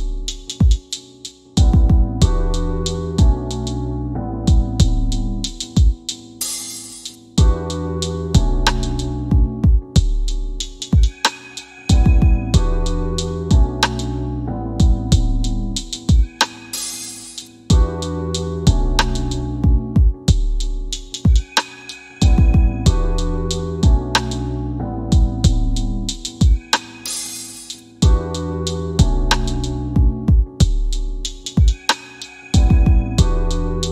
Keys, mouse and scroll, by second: 0.8 click, 11.0 alt+w, 11.5 alt+w, 12.4 right click, 13.6 click, 15.0 c, 17.1 p, 17.5 scroll down 1, 18.4 middle click, 19.5 click, 22.1 c, 23.3 f, 26.6 click, 30.1 click, 32.5 scroll down 1.